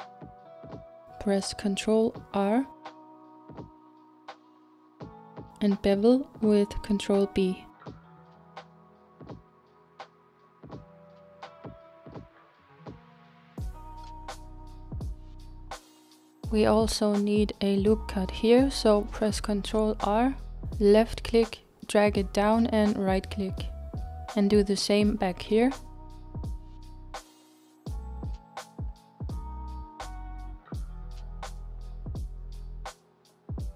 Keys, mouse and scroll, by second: 1.5 ctrl+r, 11.7-17.6 middle drag, 16.1 ctrl+z, 17.6-18.2 scroll up 1, 18.2-20.6 middle drag, 20.6 ctrl+r, 24.9-26.6 middle drag, 26.6 ctrl+r, 29.3-32.5 middle drag.